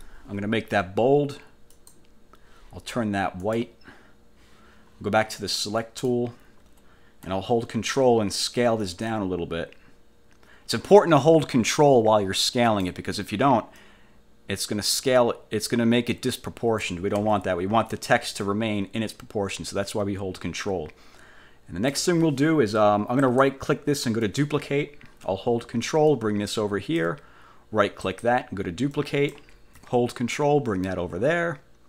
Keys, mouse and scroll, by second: 1.9 click, 3.6 click, 5.9 click, 9.0-13.2 ctrl+drag, 13.9-17.1 drag, 17.3 ctrl+z, 18.6-22.2 ctrl+drag, 23.3 middle click, 24.3 click, 26.2 ctrl+click, 28.1 middle click, 29.0 click, 30.4-31.8 ctrl+drag.